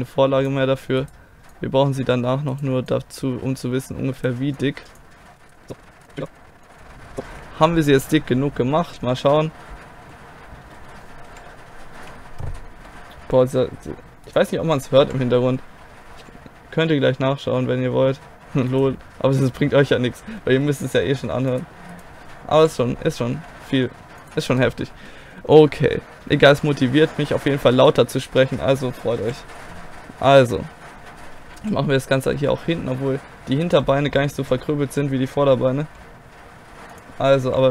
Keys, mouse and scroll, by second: 5.4 click, 5.4 right click, 5.5 middle click, 5.8 middle click, 5.9 click, 5.9 right click, 6.7 click, 7.0 middle click, 7.3 KP_1, 8.8 z, 9.9 scroll up 1, 10.0-11.3 middle drag, 11.3 KP_1, 12.9-14.3 scroll up 2, 14.3 right click, 14.4 click, 15.0 KP_1, 16.2 g, 20.4-21.5 middle drag, 21.5 click, 21.8 middle click, 22.6 KP_1, 23.4 g, 24.4-27.1 middle drag, 26.5 a, 27.2-29.2 middle drag, 29.2 KP_1, 31.6 z, 33.7-35.9 right drag, 35.9 g, 37.5 KP_1.